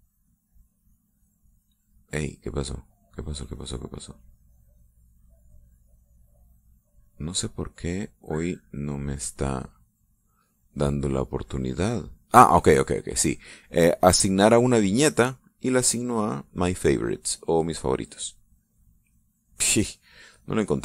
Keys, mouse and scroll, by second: 3.5 click, 9.5 middle click, 10.2 right click, 10.7-19.9 right drag, 20.1 click.